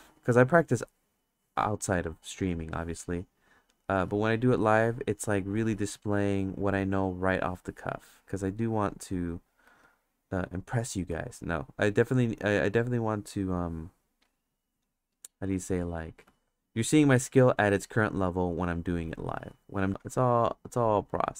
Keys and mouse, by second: 0.0 ctrl+z, 0.4 click, 2.4-3.8 drag, 4.1 ctrl+z, 4.6-5.7 drag, 6.7 click, 8.5 click, 9.6 ctrl+z, 10.1 click, 11.1 ctrl+z, 11.4 click, 12.3 click, 15.2 click, 16.3 ctrl+z, 17.0 click, 19.2 click, 19.9 ctrl+z, 20.0-21.3 drag.